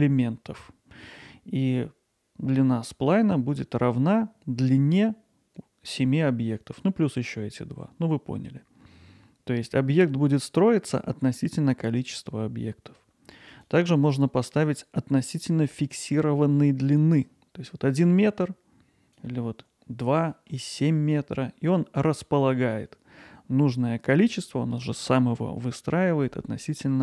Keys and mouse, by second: 13.5-17.0 drag, 18.1-19.2 drag, 20.3 middle click.